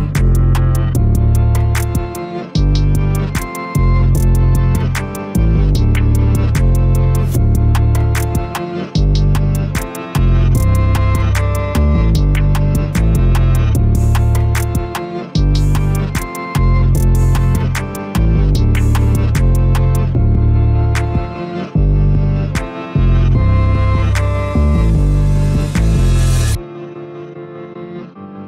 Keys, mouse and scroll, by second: 6.1 shift+click, 6.6 shift+click, 7.0 middle click, 7.6 shift+click, 8.0-11.3 middle drag, 11.3 shift+click, 11.6-12.7 middle drag, 12.7 ctrl+click, 13.0-14.6 middle drag, 14.6 shift+click, 15.5 ctrl+click, 15.8-18.1 middle drag, 18.1 shift+click, 18.5-19.6 middle drag, 19.6 ctrl+click, 20.0 middle click, 20.9 scroll down 1, 21.3-24.8 middle drag, 24.8-26.3 scroll up 1, 26.3 ctrl+b.